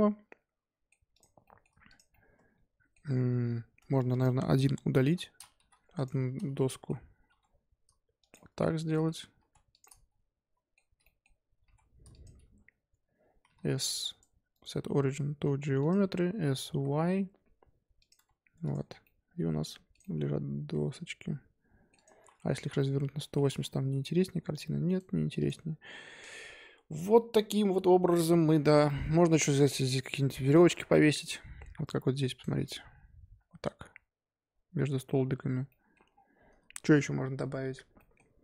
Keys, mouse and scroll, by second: 1.1 click, 1.4-1.8 shift+middle drag, 1.8 click, 2.1-3.8 middle drag, 3.8 Tab, 4.1 click, 5.0 l, 5.5 x, 6.0 Tab, 6.6-7.2 middle drag, 7.2 g, 8.3-9.3 middle drag, 9.3 g, 9.8-11.6 middle drag, 11.6 g, 12.5 Tab, 12.9 Tab, 13.4 s, 14.5-16.6 right drag, 16.6 s, 18.1 Tab, 18.5 Tab, 18.6 click, 18.8 scroll down 1, 19.0-19.9 middle drag, 19.9 click, 20.0-21.9 middle drag, 21.9 click, 22.5 r, 25.3 click, 28.9-32.0 middle drag.